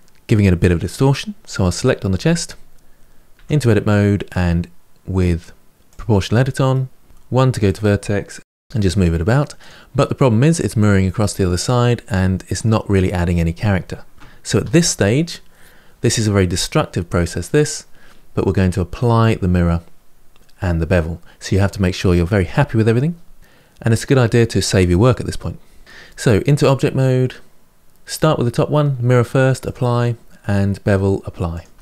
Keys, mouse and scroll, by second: 1.5 click, 3.2 Tab, 5.7 click, 6.5 middle click, 7.0 1, 7.4 click, 8.2 g, 8.4 g, 10.8-14.3 middle drag, 14.3 ctrl+z, 25.8 Tab, 27.7 click, 29.4 click, 31.3 click, 31.7 Tab.